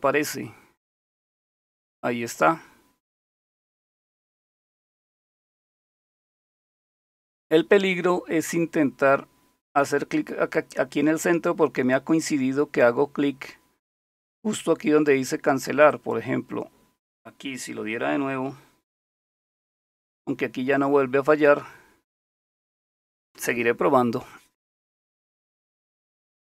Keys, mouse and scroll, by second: 0.9 click, 15.9 click, 16.2-19.3 drag, 19.3 super+Print, 22.5 click.